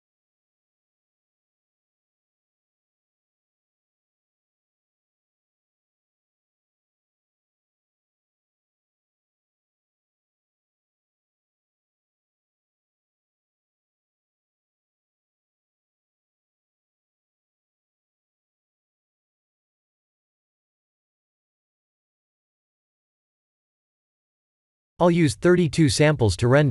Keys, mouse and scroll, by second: 5.2 shift+`, 10.0 shift+`, 21.5 click, 22.5 click, 23.7 click.